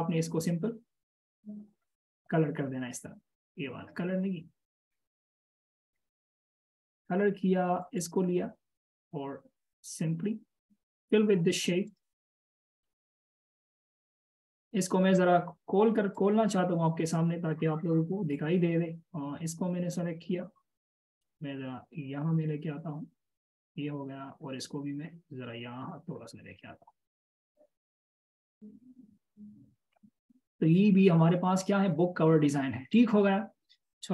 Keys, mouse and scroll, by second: 12.5 double click, 20.8 double click, 31.5 double click.